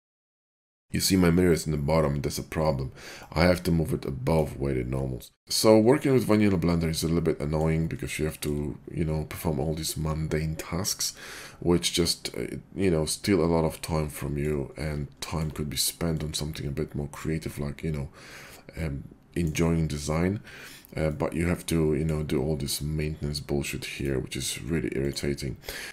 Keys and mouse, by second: 5.7-6.0 shift+middle drag, 6.0-8.0 drag, 8.0-15.2 shift+middle drag, 15.2-25.9 shift+drag, 24.0-25.9 middle drag, 24.0-25.9 right drag.